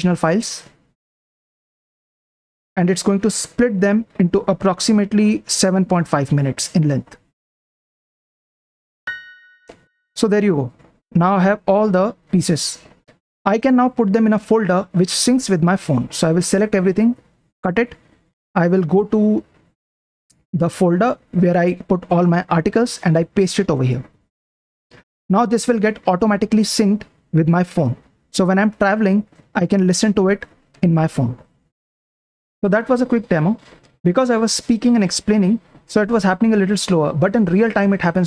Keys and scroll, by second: 10.2 Up, 10.5 Up, 11.1 Down, 11.4 Down, 11.6 Down, 11.9 Down, 16.5-20.2 typing, 20.2 Right, 21.0 Right, 21.7-22.5 typing, 21.7 Right, 22.5 Right, 23.9 p, 24.2 p, 32.0 super+Print.